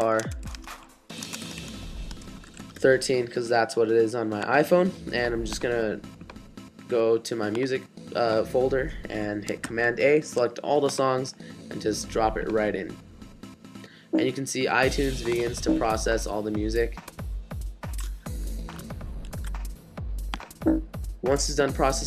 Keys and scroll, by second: 0.0-2.9 typing, 9.6 super+a, 19.4 super+w.